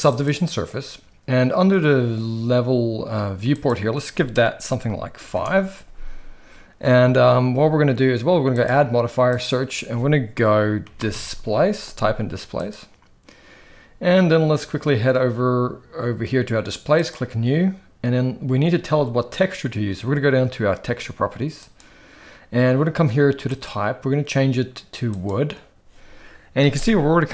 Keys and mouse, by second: 3.6-5.4 drag, 8.6-12.9 drag, 16.9 click, 21.6 click, 23.4-25.4 drag, 26.6-27.3 middle drag.